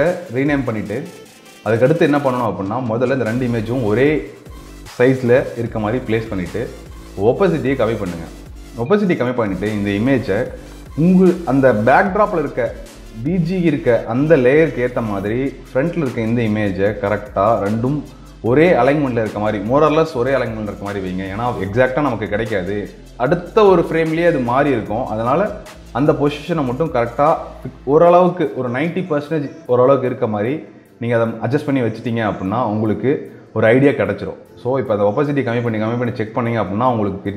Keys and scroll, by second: 8.6 ctrl+space, 14.8 ctrl+space, 29.0 ctrl+space.